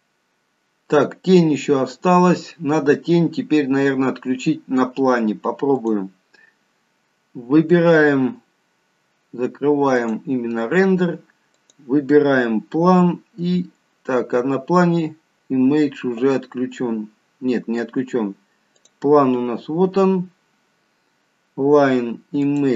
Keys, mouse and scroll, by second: 11.6 click, 17.2-18.7 scroll up 2, 18.8 click, 20.9 scroll down 2, 22.5 click.